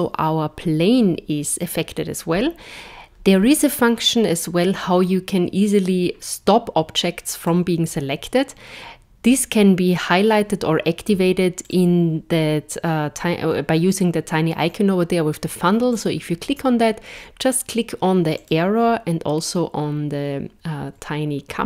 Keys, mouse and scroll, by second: 7.4 click, 11.6 click, 16.0 click.